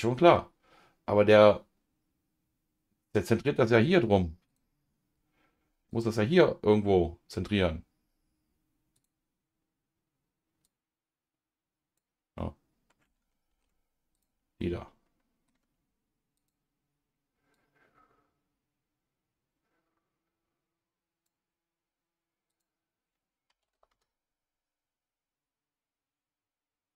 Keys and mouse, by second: 4.5 click, 5.9-7.5 drag, 8.9 click, 10.6-12.0 drag, 12.4 middle click, 13.5 ctrl+z, 14.1 click, 14.6 middle click, 16.4 click, 17.5-21.3 drag, 22.5-23.9 drag.